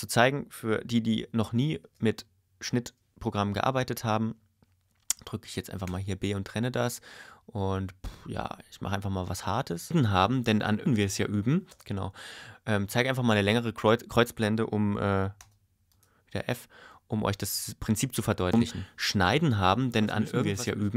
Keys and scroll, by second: 3.4 ⟲, 9.9 space, 11.7 space, 18.5 space.